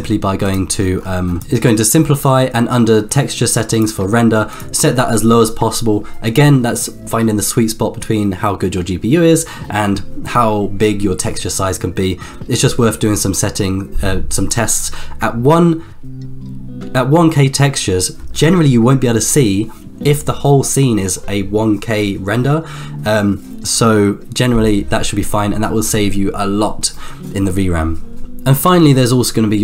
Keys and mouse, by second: 2.4 click, 3.0 click, 5.5 click, 6.3-16.8 drag, 28.2 middle click.